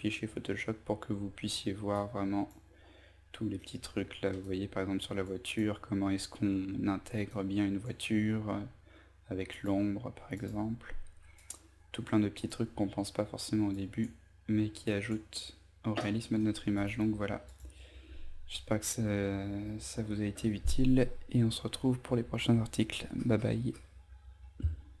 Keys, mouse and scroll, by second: 1.5 click, 2.6 scroll down 1, 3.1-3.9 scroll up 1, 3.9 click.